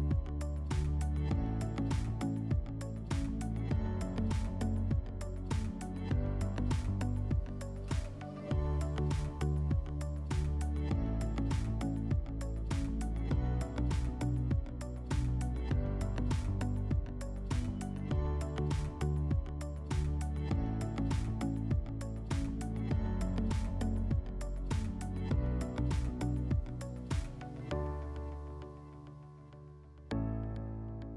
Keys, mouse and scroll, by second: 0.2 right click, 0.6 s, 1.8 click, 3.7 click, 4.2 click, 5.3 click, 5.4 click, 6.5-7.8 typing, 7.0 Tab, 7.9 Return, 10.1 click, 11.6 click, 14.2 shift+click, 15.2 click, 16.4 click, 17.5 middle click, 18.1-18.9 middle drag, 18.9-20.1 drag, 20.1 middle click, 20.7 click, 21.7 click, 21.8 click, 22.8-24.2 typing, 23.3 Tab, 24.2 Return, 25.7 click, 27.3 click, 28.4 click, 30.2 click, 30.9 click.